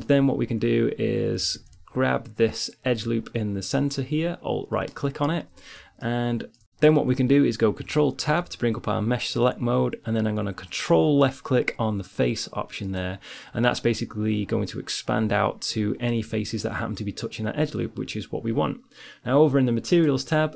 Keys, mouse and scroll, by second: 2.0 ctrl+Tab, 4.4 click, 6.0-8.7 drag, 8.7 ctrl+Tab, 20.4-20.5 right drag.